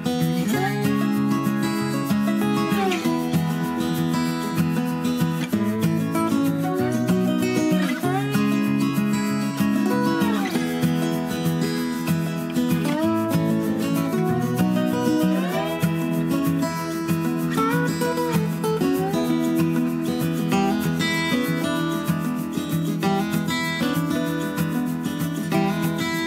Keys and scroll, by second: 8.6 Tab, 9.5 Tab, 22.1 3, 22.2 Return.